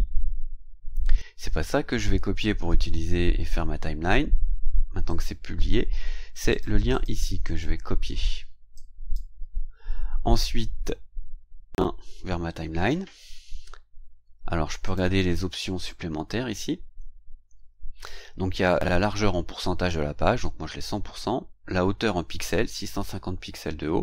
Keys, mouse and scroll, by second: 5.1 click, 6.3 click, 6.9 click, 7.4 right click, 8.7 click, 12.8 ctrl+v, 14.8 click.